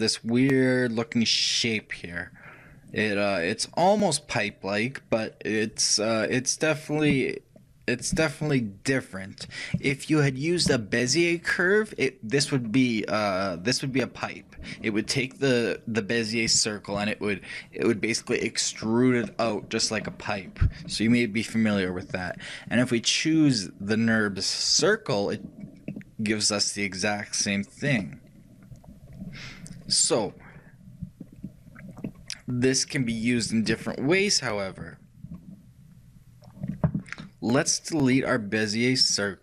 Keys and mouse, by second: 22.9-25.3 drag, 26.0-28.0 middle drag, 32.0-37.7 middle drag, 37.7-39.4 drag, 39.3 right click.